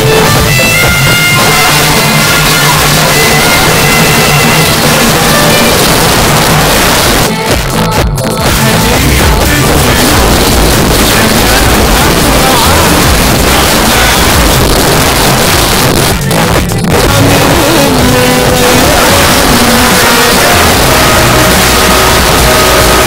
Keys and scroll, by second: 5.8 Page_Down, 14.6 Page_Down, 23.0 space.